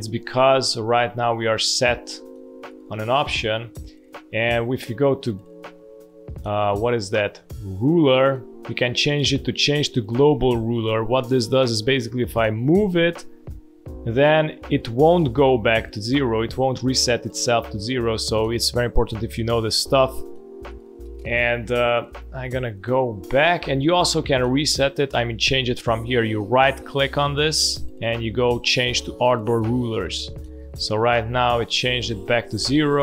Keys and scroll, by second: 11.0 space, 12.5 shift+o, 13.7 b, 15.5 v, 16.8 space, 20.7 space, 22.2 ctrl+z, 31.0 space.